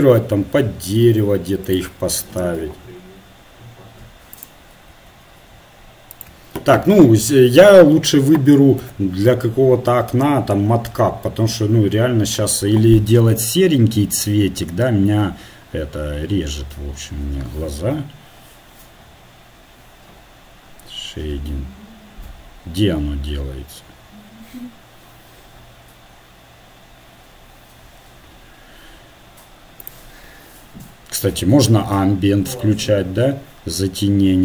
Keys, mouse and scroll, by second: 2.2 r, 4.9 g, 29.8-34.4 drag.